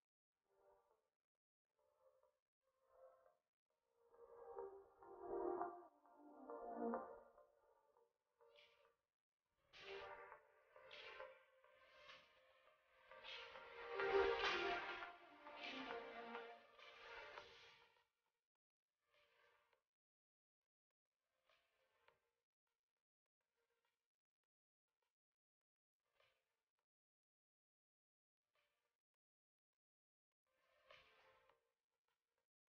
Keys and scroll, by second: 2.7 shift+space, 21.0 shift+space, 22.2 shift+space, 29.3 shift+space.